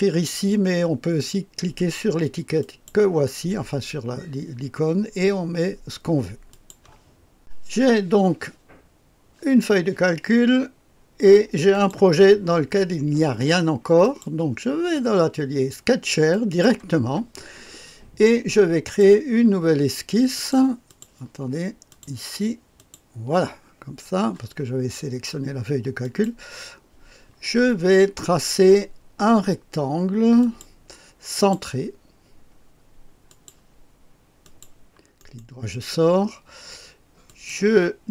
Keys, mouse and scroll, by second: 2.6 click, 6.5 click, 11.7 click, 14.0 click, 16.3 click, 18.8 click, 20.3 click, 20.8 click, 21.9 click, 22.8 click, 26.0 click, 30.4 click, 31.3 click, 33.2 click, 34.4 click, 35.2 right click, 37.2 click.